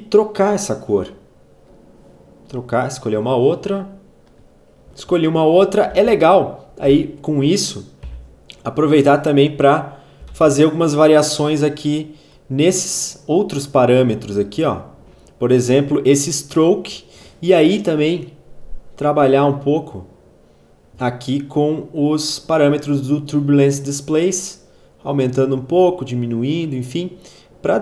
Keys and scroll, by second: 4.2 space, 5.9 v, 6.9 u, 8.0 k, 9.9-10.8 typing.